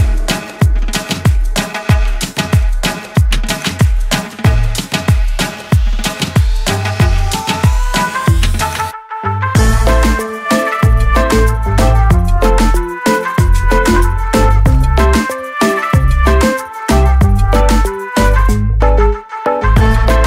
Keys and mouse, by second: 9.0 click, 10.2 click, 11.5 right click, 12.4 click, 13.8 click, 13.9 click, 15.4 click, 16.9 click, 18.0 click.